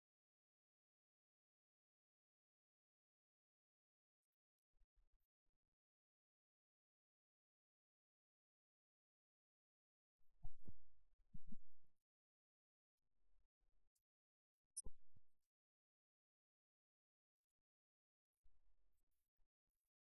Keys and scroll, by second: 4.5 alt+super+s, 5.0 super+s, 5.3 super+Page_Up, 5.7 Home.